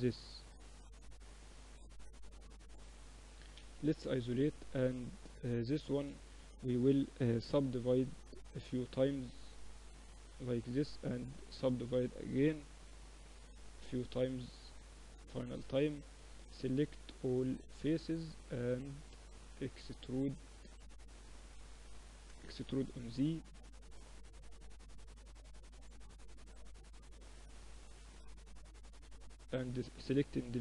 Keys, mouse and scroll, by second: 2.0 Tab, 2.9 KP_Divide, 3.1 middle click, 3.3 Tab, 4.1 Tab, 4.5 Tab, 5.0 a, 5.2 a, 7.3 ctrl+r, 9.6 a, 9.7 a, 10.1 w, 12.7 w, 15.2 a, 16.4 a, 21.9 e, 28.7-30.6 drag.